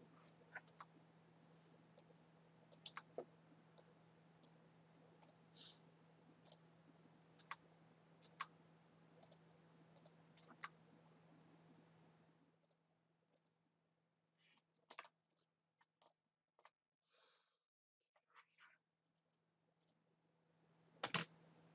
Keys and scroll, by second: 0.7 Down, 2.9 Down, 7.4 Down, 10.4 Down, 14.9 ctrl+z, 21.0 Down.